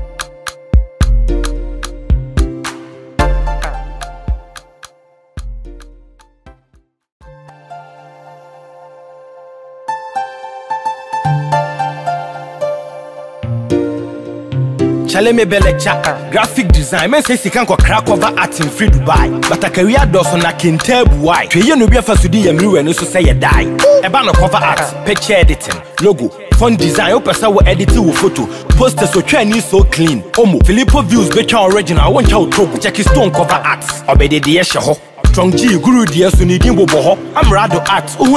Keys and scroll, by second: 4.5 ctrl+t, 20.8 ctrl+t, 30.5 Return, 35.3 ctrl+t.